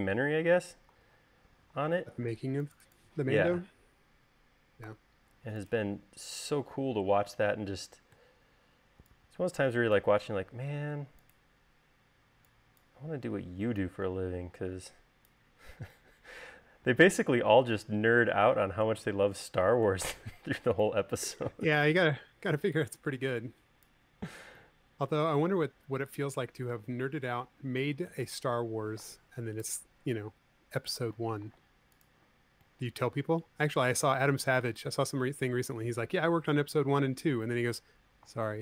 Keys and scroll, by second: 0.7 Escape, 2.9 space, 5.5 v.